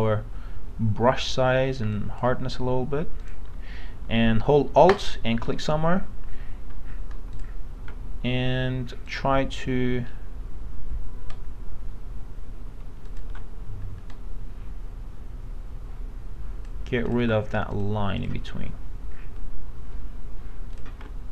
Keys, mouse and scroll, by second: 7.3 alt+click, 13.1 alt+click, 14.1-16.9 drag, 17.1 alt+click, 20.7 alt+click.